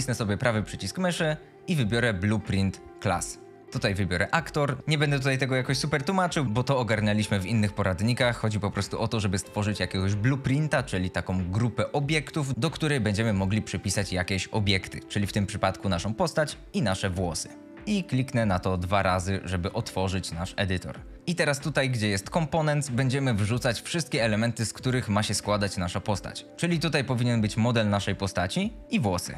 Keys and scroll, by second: 17.8 Return.